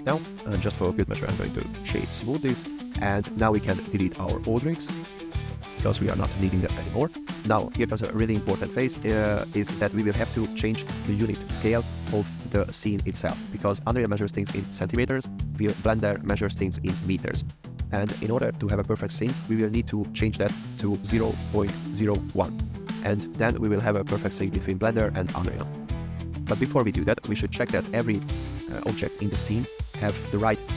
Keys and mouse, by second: 0.9 shift+click, 1.2 right click, 1.9 click, 3.9 click, 4.1 click, 4.4 click, 5.3 x, 6.8 shift+drag, 28.6 click.